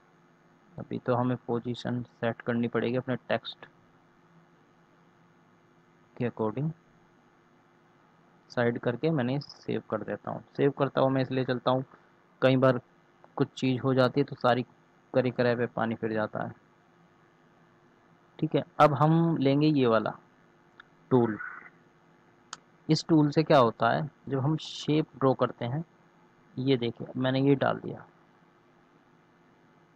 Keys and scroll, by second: 3.8 ctrl+z, 10.3 ctrl+s.